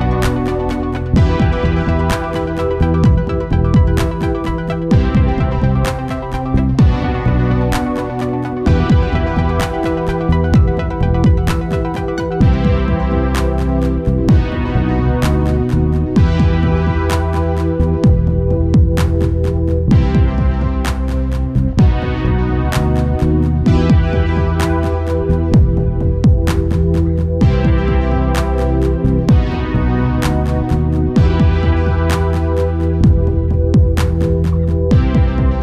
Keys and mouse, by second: 2.9 ctrl+s, 6.2 KP_7, 7.8-9.6 drag, 7.8-9.6 right drag, 8.1 shift+a, 11.5 click, 12.5-13.6 middle drag, 14.6 Tab, 16.6-18.4 drag, 19.0-20.9 drag, 21.0-22.7 drag, 24.1-25.6 right drag, 25.6 b, 27.9 g, 32.6 KP_Subtract, 33.3 KP_1, 33.7 ., 34.2 KP_8, 35.2 KP_1.